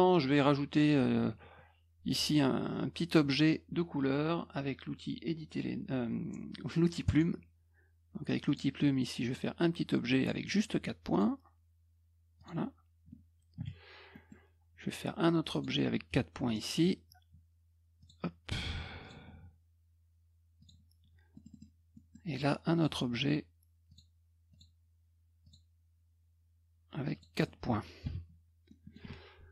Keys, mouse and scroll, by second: 7.0 click, 8.4 click, 9.2 click, 10.2 click, 11.1 click, 12.3 click, 14.1 middle click, 15.5 click, 16.4 click, 18.0 click, 19.0 click, 20.6 click, 21.3 middle click, 21.3-22.1 scroll up 3, 21.5 middle click, 21.9 middle click, 22.7 click, 23.9 click, 24.5 click, 25.4 click, 27.1 click, 28.6 middle click.